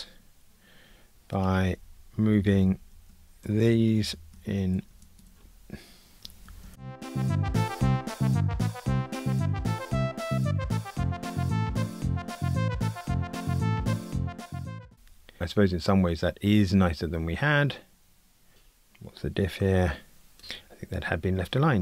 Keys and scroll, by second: 2.9 shift+Tab, 6.8 alt+shift+Right, 7.2 super+z, 8.7 Delete, 10.4 shift+Tab, 20.4 Escape.